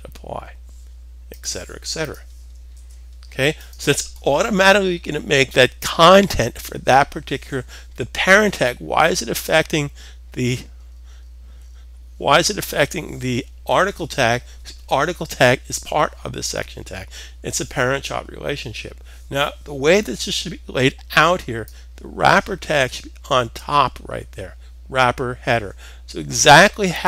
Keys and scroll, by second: 0.5 typing, 2.3 super+s.